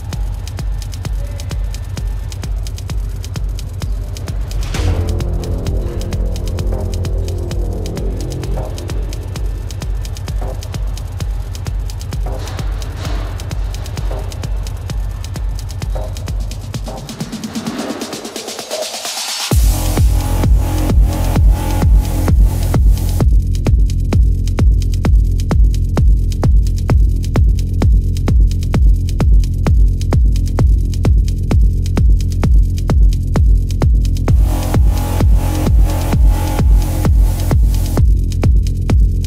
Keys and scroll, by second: 3.0 ctrl+alt+z, 4.0 ctrl+alt+z, 5.4 ctrl+alt+z, 9.6 ctrl+alt+z, 14.7 ctrl+alt+z, 35.8 space, 36.5 ctrl+-, 37.5 ctrl+-.